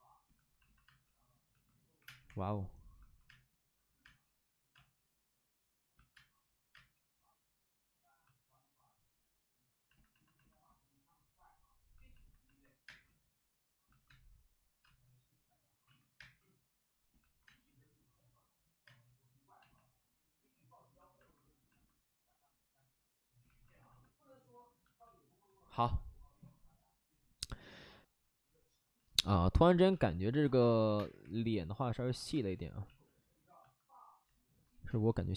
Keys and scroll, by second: 0.8 space, 1.9-4.6 typing, 6.1 space, 6.6 space, 12.8 space, 14.0 space, 14.8 space, 15.8 ctrl+z, 16.1 space, 17.4 space, 18.8 space, 21.7 space, 29.8 space, 30.8 3, 30.9 space, 31.1 3, 32.3 space, 32.8 ctrl+z, 34.8 space.